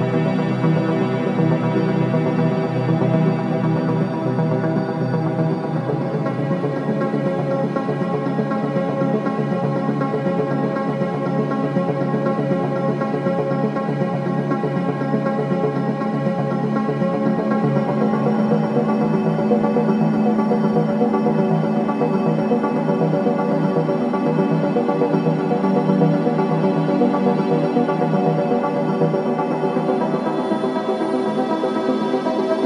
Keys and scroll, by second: 5.8 Escape, 10.5 Escape, 16.9 ], 24.1 Escape, 32.5 Escape.